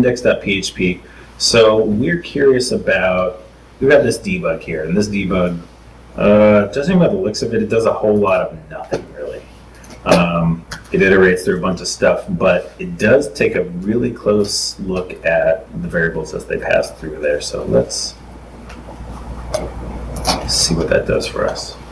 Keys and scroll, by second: 9.6 super+s, 15.6 super+Tab, 19.2 super+Tab, 19.8 super+Tab.